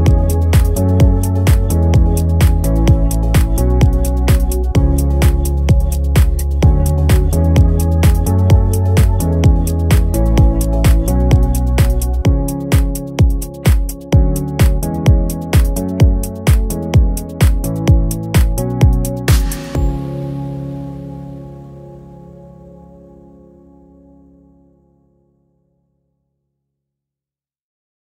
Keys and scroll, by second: 0.0-0.6 typing.